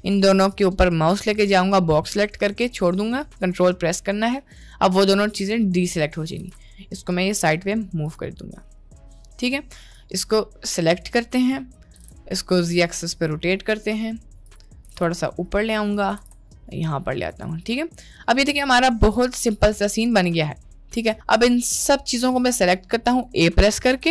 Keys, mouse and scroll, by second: 5.5-5.9 middle drag, 6.4 g, 8.6 middle click, 9.9-11.4 drag, 11.9 r, 14.9 g, 16.2 g, 17.8-19.6 middle drag, 20.0-20.3 middle drag, 21.7-23.3 drag.